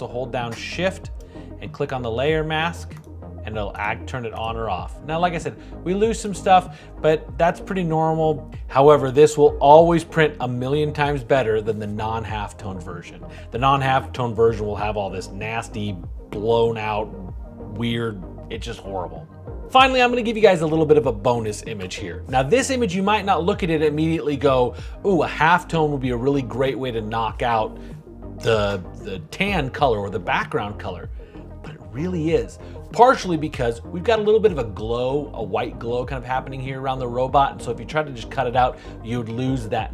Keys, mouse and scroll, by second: 1.0 shift+click, 3.5 shift+click.